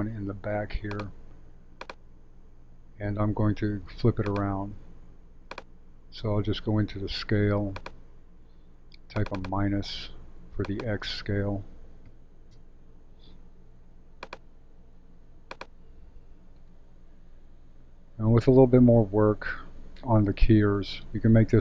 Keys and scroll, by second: 12.0 -, 12.5 Return.